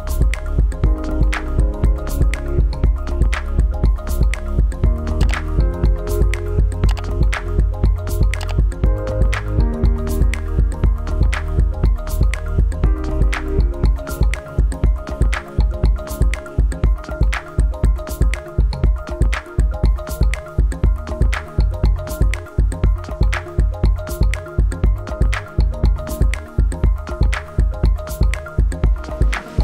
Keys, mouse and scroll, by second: 5.8 click, 13.1 click, 22.0 click, 25.8 click.